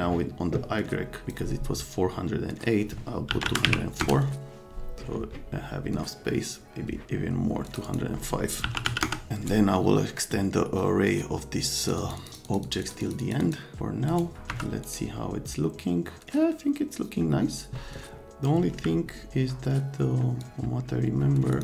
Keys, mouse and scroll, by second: 1.2 click, 3.3 KP_1, 3.4 KP_0, 3.7 KP_4, 4.0 KP_Enter, 7.6 click, 7.8 click, 8.6 KP_2, 8.7 KP_0, 8.8 KP_5, 9.0 KP_Enter, 9.5 right click, 11.8 click, 12.0 click, 12.2 click, 12.3 click, 12.4 click, 12.6 click, 12.8 click, 13.0 click, 13.2 click, 13.4 click, 14.1 scroll up 2, 14.5 F3, 14.8 scroll up 2, 20.4 click, 21.5 click.